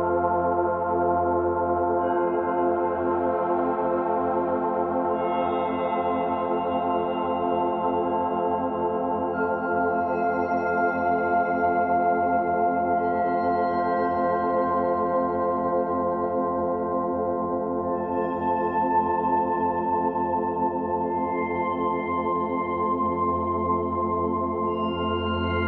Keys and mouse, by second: 0.2-0.6 alt+shift+drag, 0.7-1.0 ctrl+alt+drag, 1.3 alt+click, 1.6 alt+shift+drag, 2.3 ctrl+alt+drag, 2.9 ctrl+alt+click, 3.2-3.5 ctrl+alt+shift+drag, 3.7-4.6 ctrl+alt+shift+drag, 5.3-8.3 drag, 6.9 typing, 9.2 click, 12.9 click, 14.2 g, 15.0 Escape, 16.2-20.3 drag, 21.7 g, 23.2 click, 24.6 click, 25.5 r.